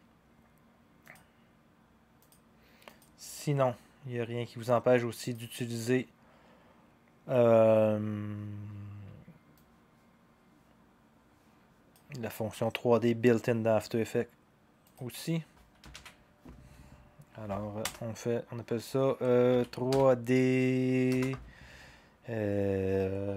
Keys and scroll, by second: 15.9 ctrl+d, 17.8 Return, 19.5-19.9 typing.